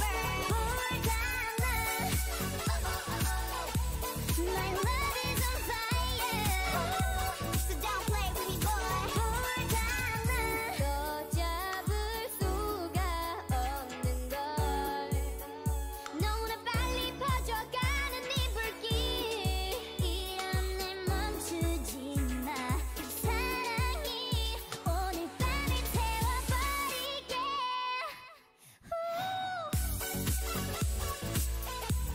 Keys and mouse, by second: 0.0 x, 2.1-3.1 typing, 4.7 a, 5.3 click, 8.5 a, 10.9 alt+m, 12.0 a, 20.6 ctrl+e, 21.1 a, 23.7 ctrl+e, 27.0 ctrl+e, 27.4 a, 30.9 click, 31.8 ctrl+Tab.